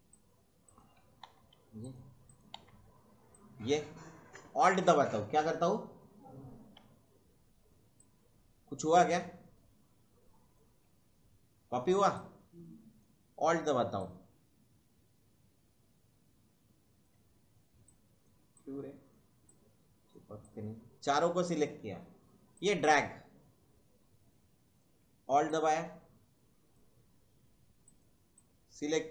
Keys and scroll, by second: 1.3 Delete, 2.6 Delete.